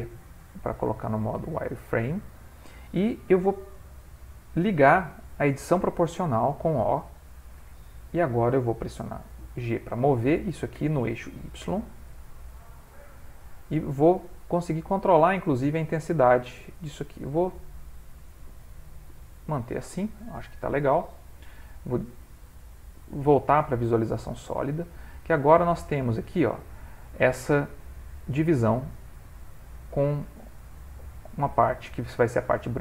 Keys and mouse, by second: 1.6 ctrl+middle click, 6.3 o, 10.7 g, 19.9 middle click, 20.6 middle click, 20.6 ctrl+middle click, 20.8 ctrl+middle click, 21.0 middle click, 21.6 z, 24.5 middle click, 25.1 ctrl+middle click, 25.5 middle click, 26.9 ctrl+middle click, 27.4 middle click, 30.0 ctrl+middle click, 30.6 middle click.